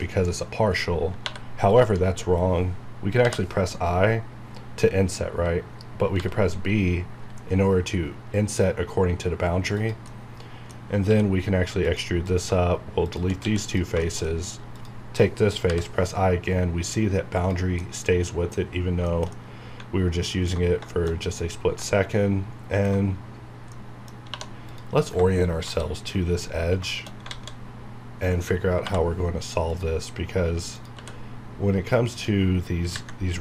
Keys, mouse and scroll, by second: 1.3 3, 1.6 click, 6.2 b, 9.8 b, 9.8 click, 10.1 middle click, 10.8 scroll down 1, 11.1 e, 11.8 click, 12.5 click, 13.4 x, 13.7 click, 14.0 shift+middle click, 14.5 scroll up 1, 14.8 click, 17.3 click, 17.8-23.2 middle drag, 23.2 scroll down 1, 23.7 middle click, 24.3 2, 24.6 click, 26.6 scroll up 1, 26.9 shift+middle click, 27.3 alt+a, 28.8 k, 29.6 click, 30.8 click, 31.0 e, 32.1 click.